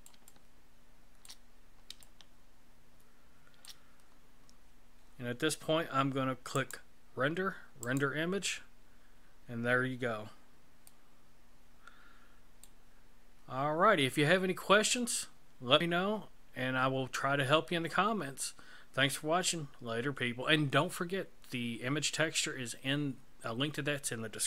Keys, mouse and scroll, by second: 0.3 shift+middle click, 1.5 scroll down 2, 2.0 shift+middle click, 6.5 click.